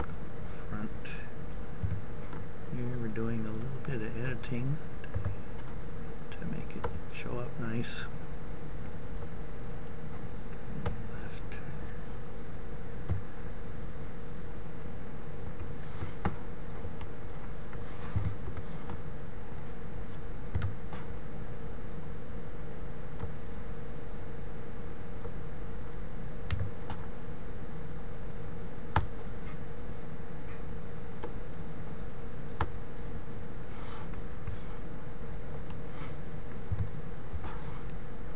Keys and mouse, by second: 3.0 r, 4.9 s, 12.5 ctrl+KP_3, 18.8 u, 21.1 a, 27.2 s, 29.3-31.1 drag, 33.3 click, 34.4 KP_3, 36.3 u.